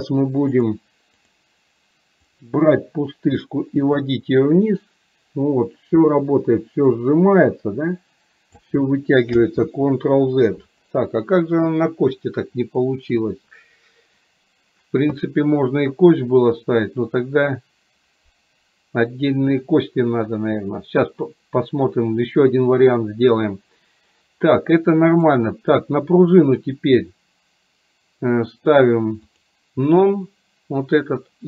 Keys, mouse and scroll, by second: 0.6 click, 3.5 click, 3.7-8.6 drag, 9.7 ctrl+z, 25.2 click.